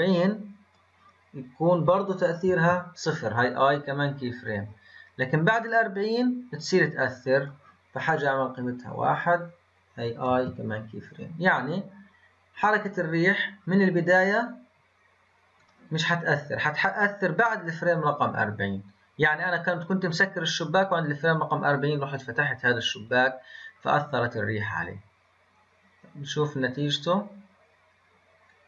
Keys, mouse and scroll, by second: 4.4-10.2 drag, 12.5-13.5 scroll up 7, 13.5-14.1 scroll up 7, 15.5-28.6 drag.